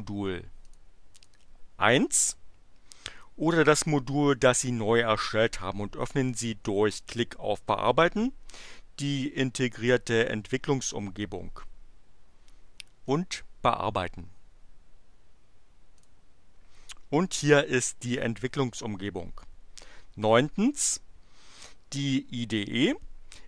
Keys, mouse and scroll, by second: 0.6 click, 1.2 click, 13.0 click, 15.9 click.